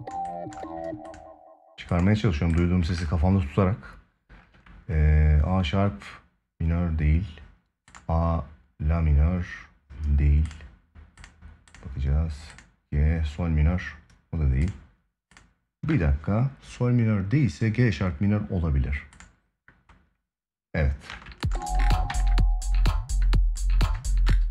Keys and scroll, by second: 20.8 space, 21.9 ctrl+s.